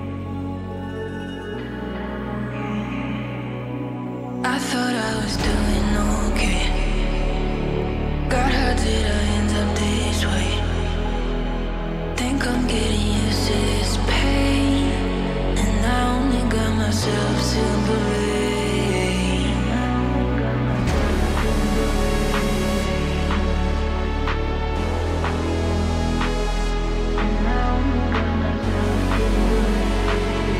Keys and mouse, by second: 0.8 click, 1.3 g, 3.8-4.7 shift+middle drag, 5.3-5.8 shift+middle drag, 7.0 click, 8.2 s, 12.5 s, 12.6 y, 15.0 s, 15.3 y, 17.2-17.6 drag, 18.1 click, 22.3 ctrl+r, 27.1 click, 28.3 shift+middle click.